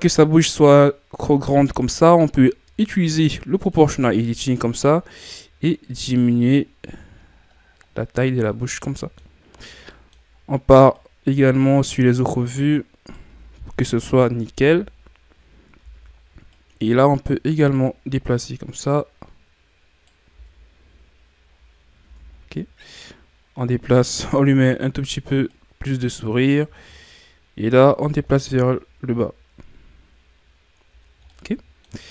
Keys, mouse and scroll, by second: 0.6-0.9 scroll down 5, 1.8-3.7 scroll up 3, 3.7 click, 5.2-8.3 right drag, 8.6 scroll down 4, 8.9 middle click, 9.5-9.9 scroll up 5, 9.9-11.0 middle drag, 11.0-13.9 right drag, 13.9 KP_1, 14.6 Tab, 14.9-15.3 scroll down 7, 15.3 scroll up 2, 15.8 Tab, 16.6-20.3 right drag, 20.3 Tab, 20.8-21.6 scroll down 2, 21.6-22.0 scroll up 6, 22.0 Tab, 22.6 right click, 25.5-28.2 right drag, 28.2 Tab, 28.5-30.0 scroll down 9, 30.0-31.1 scroll up 7, 31.1 ctrl+scroll down 3, 31.3-32.1 middle drag.